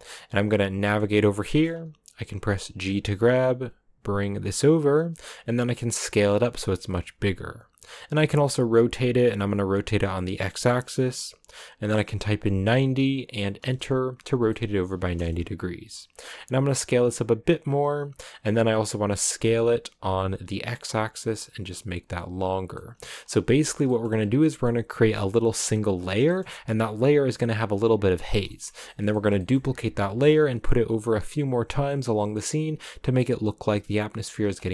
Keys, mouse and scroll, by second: 1.3 scroll up 1, 1.4-2.7 middle drag, 2.7 g, 5.4 s, 8.1 r, 14.4-16.3 middle drag, 16.3 s, 18.2-19.3 middle drag, 19.3 s, 22.7 middle click, 23.1-23.6 scroll down 2, 23.6 shift+middle click, 24.1 scroll up 2, 24.4-28.1 middle drag, 28.1 scroll down 2, 28.4-29.6 shift+middle drag, 29.6-32.1 scroll down 1, 32.1-34.7 middle drag.